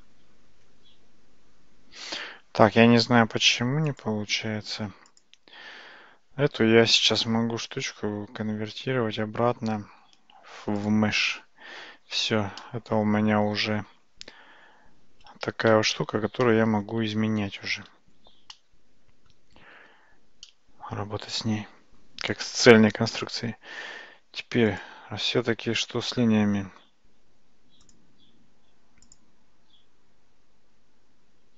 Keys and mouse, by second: 3.9 click, 7.1-10.9 drag, 12.7-13.6 middle drag, 13.9 Tab, 15.7 a, 16.5 middle click, 17.9 alt+z, 18.6 middle click, 19.8 Tab, 20.5-22.6 middle drag, 24.7 click.